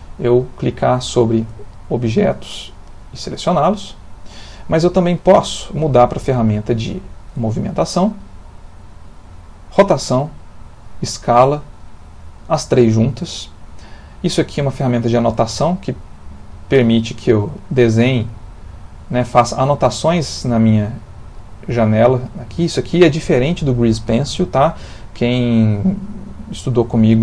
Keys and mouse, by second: 0.2 click, 1.7 ctrl+middle click, 2.8 click, 3.3 click, 4.0 click, 5.7 click, 6.8 click, 8.8 click, 10.6 click, 11.8 click, 15.0 click, 16.0 click, 17.6 click, 18.3 click, 19.6 click, 20.3 click, 20.9 click, 24.9 Escape.